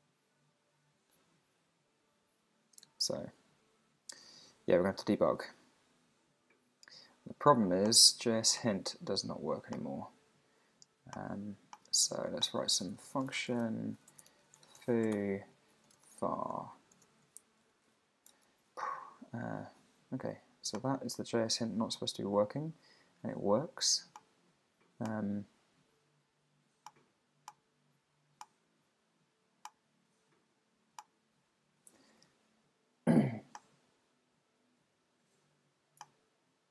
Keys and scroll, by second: 13.5-15.4 typing.